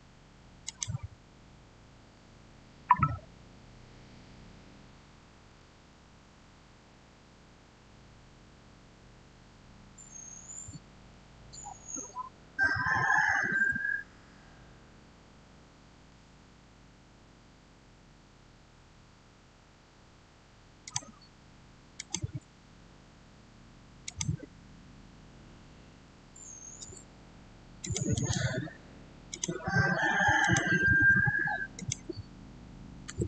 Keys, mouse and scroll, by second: 0.5 click, 5.0-5.8 typing, 5.2 click, 5.9 Return, 10.5-10.8 typing, 13.5 Return, 20.7 click, 23.9 click, 25.9 5, 26.6 Return, 27.7 click, 28.0 right click, 29.2 click, 33.0 Return.